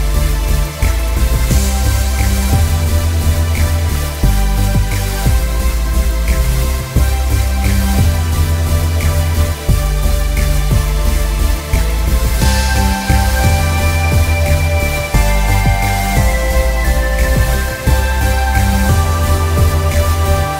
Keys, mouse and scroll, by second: 0.1 scroll down 1, 0.2 space, 0.6 click, 1.9 click, 2.2 ctrl+z, 2.4 scroll up 1, 2.6 click, 3.6 click, 4.1 z, 4.3 click, 4.9 space, 10.8 click, 11.0 alt+scroll up 1, 11.2 space, 11.7 scroll up 1, 11.8 click, 12.2 shift+click, 12.7 click, 12.8 scroll down 1, 12.9 click, 13.2 scroll, 13.4 scroll up 1, 13.9 click, 14.6 shift+space, 14.7 shift+click, 14.9 alt+shift+scroll down 2, 15.1 click, 15.7 scroll up 1, 15.8 click, 16.4 space, 16.5-17.0 alt+scroll down 2, 17.0 space, 17.1 alt+scroll up 2, 17.3 click.